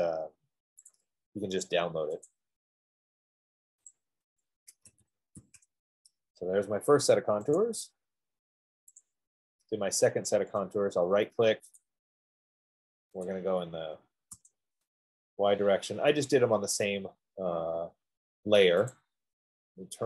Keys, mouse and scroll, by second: 2.2 F15, 2.2 click, 2.6 click, 4.1 click, 5.1-5.8 typing, 7.3-8.0 typing, 8.0 click, 8.9 middle click, 9.7 click, 10.5 middle click, 11.3 right click, 12.3 click, 13.6 click, 14.7 Return, 19.7 click.